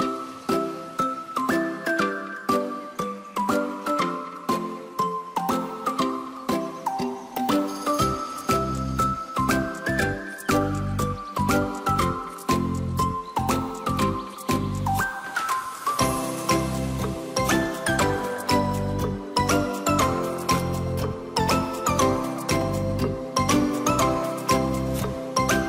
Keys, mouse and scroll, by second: 0.9-2.6 scroll up 2, 2.6-3.6 scroll down 5, 3.6-6.2 drag, 6.3-8.8 drag, 9.1 click, 9.4-10.4 scroll down 3, 10.4-12.1 scroll down 1, 12.3-13.0 scroll up 2, 13.0-17.7 drag, 17.7-20.1 scroll up 3, 20.1-23.4 drag, 23.5-24.2 scroll down 3, 24.2-25.6 middle drag.